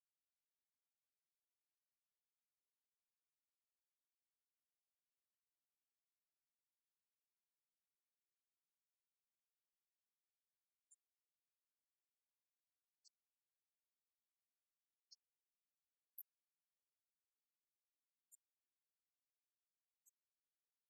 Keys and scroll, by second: 3.6 ctrl+shift+Down, 20.7 shift+Up.